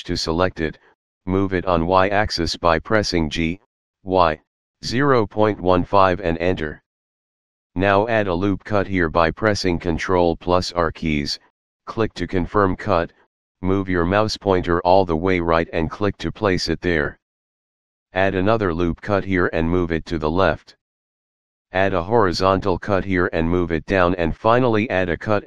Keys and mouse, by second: 0.2 click, 2.1 g, 4.0 y, 4.0 KP_Decimal, 4.6 KP_1, 5.6 KP_5, 6.0 Return, 11.1 ctrl+r, 16.6 click, 23.0 ctrl+r, 23.4 click.